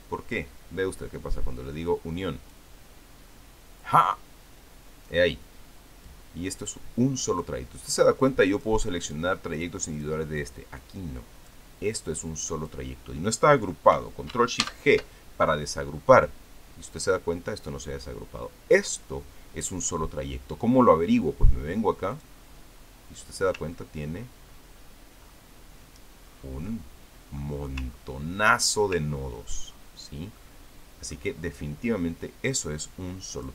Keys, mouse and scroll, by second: 3.3 click, 6.9-8.6 drag, 8.7 click, 9.0-9.8 drag, 9.9 click, 10.4-11.1 drag, 11.2-13.7 drag, 15.4 ctrl+shift+g, 17.0-20.7 drag, 22.9 click, 24.5-25.0 ctrl+scroll up 2, 25.4-25.8 ctrl+scroll up 2, 26.0 ctrl+scroll up 2, 27.1-27.5 ctrl+scroll up 2, 27.5-28.6 ctrl+drag, 28.7-29.4 ctrl+scroll up 4, 29.9-30.8 ctrl+scroll down 3, 31.2 ctrl+middle click, 32.1-32.5 ctrl+scroll up 2, 32.7 ctrl+scroll down 2.